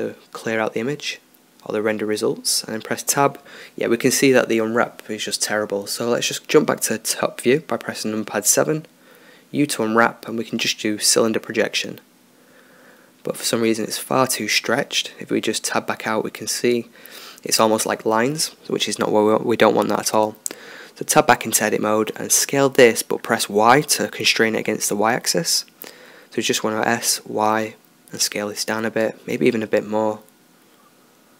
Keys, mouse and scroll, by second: 1.6 Tab, 3.3-4.7 middle drag, 4.9-6.4 middle drag, 6.4 KP_7, 9.1 u, 16.0 Tab, 19.5 Tab, 21.0 s, 27.2-29.1 middle drag, 29.3-31.3 middle drag.